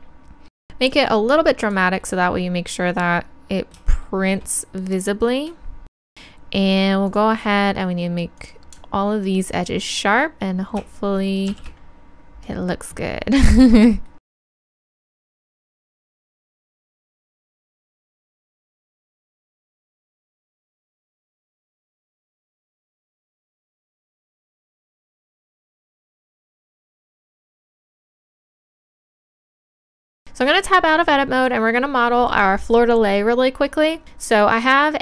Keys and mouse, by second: 2.1 middle click, 2.8-7.1 middle drag, 7.1-10.3 drag, 9.6-11.5 right drag, 11.5 shift+e, 13.5 click, 14.3 middle click, 14.3-18.7 typing, 14.6 click, 15.8 click, 15.9 right click, 16.5 right click, 19.8 middle click, 21.0 middle click, 21.8 ctrl+r, 22.3 click, 23.0 middle click, 23.1 middle click, 23.4 click, 23.6 right click, 23.8 click, 23.9 ctrl+z, 24.4 click, 24.4 right click, 24.9 middle click, 26.4 middle click, 26.6 Tab, 27.4 click, 28.1 z, 28.5 shift+e, 28.9 z, 30.1 Tab.